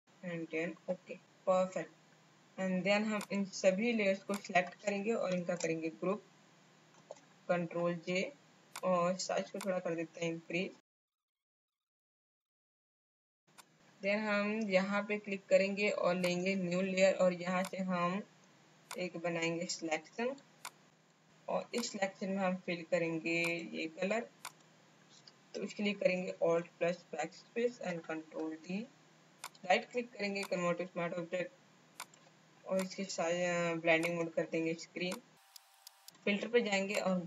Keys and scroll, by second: 0.0 space, 5.3 ctrl+shift+g, 12.6 space, 26.3 alt+BackSpace.